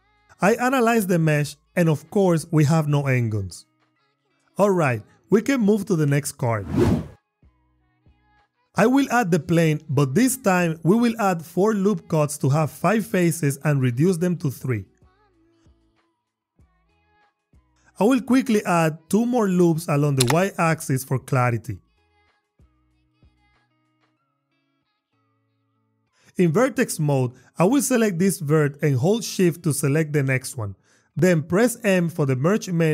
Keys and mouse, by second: 3.5 Tab, 6.3 g, 6.8 shift+a, 9.3 Tab, 11.1 ctrl+r, 13.2 click, 13.6 click, 14.5 ctrl+r, 14.9 click, 15.3 click, 18.6 ctrl+r, 19.3 click, 21.5 click, 22.4 ctrl+r, 22.6 click, 23.5 click, 24.6 Tab.